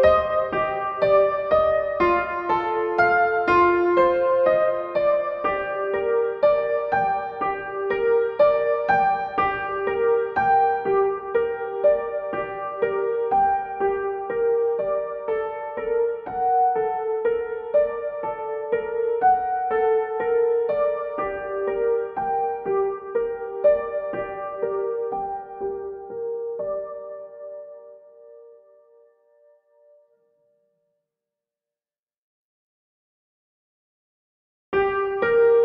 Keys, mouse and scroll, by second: 8.0-16.1 drag, 16.1 right click, 17.5 click, 19.7-35.6 drag.